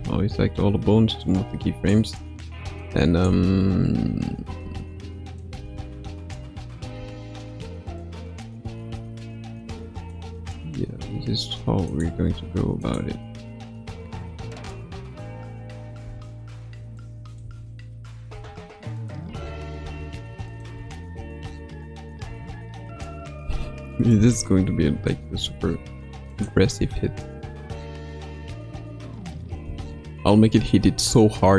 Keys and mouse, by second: 1.1 click, 1.3 click, 2.7-4.5 drag, 3.2 space, 4.5 space, 5.2 click, 5.6 space, 6.9 space, 7.9 click, 10.0 click, 11.0 r, 12.1 s, 15.1 a, 15.9 i, 16.9-17.4 drag, 17.4-20.7 typing, 18.9 click, 20.4 click, 22.2 space, 25.6 ctrl+s, 26.2 click, 26.7 space, 29.6 space.